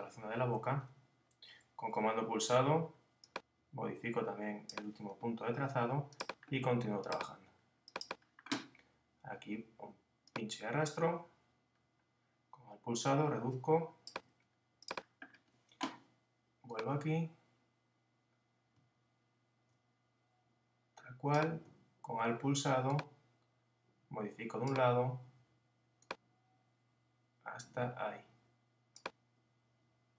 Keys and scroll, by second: 0.2 Left.